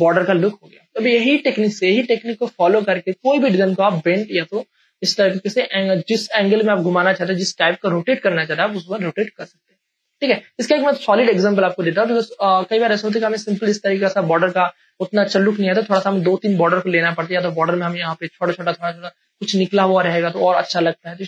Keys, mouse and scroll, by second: 0.8 space, 1.2 ctrl+click, 1.8 click, 2.5-10.9 ctrl+drag, 10.9 scroll down 1, 12.1 click, 13.4 space, 13.7-21.2 ctrl+drag.